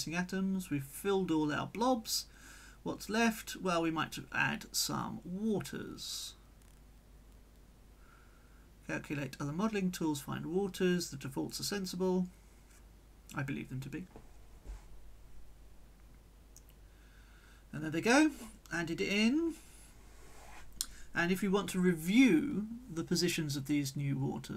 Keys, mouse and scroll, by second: 1.7 click, 2.1-4.7 drag, 3.1 right click, 4.9 middle click, 8.6 click, 9.9 click, 11.3 click, 17.9 click, 19.5 click, 20.5 click, 21.1 click, 22.7-24.5 drag.